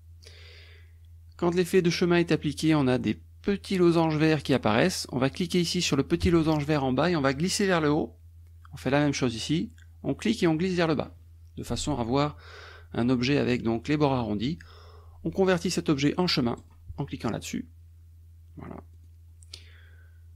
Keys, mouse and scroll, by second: 7.2 click, 10.5 click, 16.6 click, 18.9 click, 19.5 click.